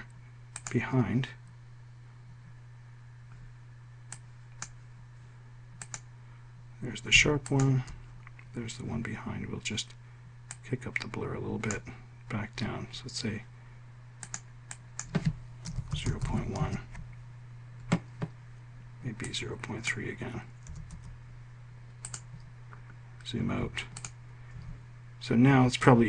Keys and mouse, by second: 0.9 click, 6.2 click, 16.1 0, 16.8 1, 21.0 3.